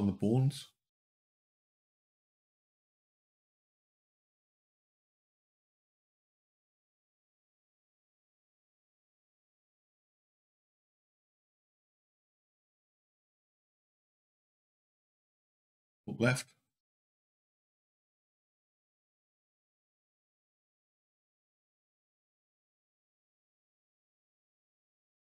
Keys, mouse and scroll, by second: 0.9 click, 1.6 click, 8.2 click, 10.3 KP_5, 10.5 KP_1, 11.8 click, 12.5 click, 18.8 click, 19.0 n, 20.1 click, 21.8 click, 23.1 scroll up 2, 23.6 scroll down 2, 24.7 click.